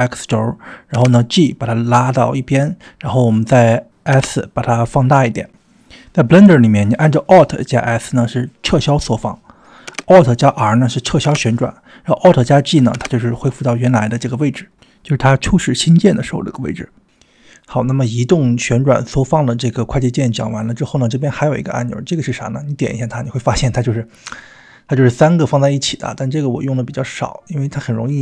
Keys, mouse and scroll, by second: 0.8 middle click, 0.9 g, 3.7 scroll up 1, 4.1 g, 4.5 s, 6.9-7.5 middle drag, 7.8 drag, 9.9 alt+s, 11.3 alt+r, 12.9 alt+g, 14.0-16.1 middle drag, 19.4 click, 21.8 click, 23.6 click, 23.9-25.5 drag, 26.3 click, 27.7 click.